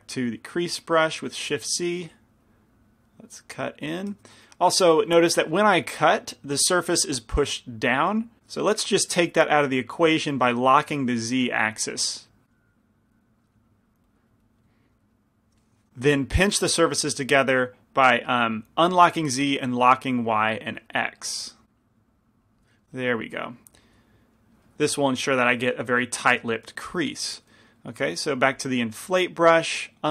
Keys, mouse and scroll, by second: 0.0 shift+c, 0.0 f, 3.2-5.0 drag, 5.0 ctrl+z, 6.4 ctrl+z, 9.2 ctrl+z, 11.8 f, 13.5-15.5 drag, 14.6 middle click, 14.6 right click, 15.9 ctrl+z, 15.9 f, 20.8 f, 22.7 click, 22.7 middle click, 22.9-24.0 drag, 23.7-27.4 middle drag, 27.4 i, 27.4 f, 27.7 middle click, 28.5 f.